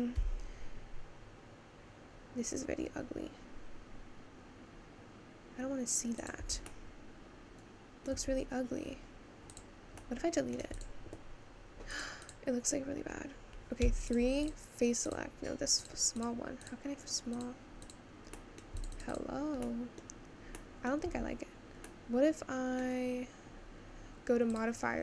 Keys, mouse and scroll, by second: 0.2 s, 6.5 Tab, 6.6-8.2 middle drag, 8.2 Tab, 8.8-9.7 scroll up 1, 9.7 click, 10.1 middle click, 10.8 click, 11.4-12.1 scroll down 2, 12.2 click, 14.0 3, 14.1 click, 14.4 click, 18.4 middle click, 18.8 click, 18.9 click, 19.1 click, 19.8 middle click, 20.2-20.7 scroll down 1, 20.7 middle click, 21.1 Tab, 21.9-25.0 middle drag.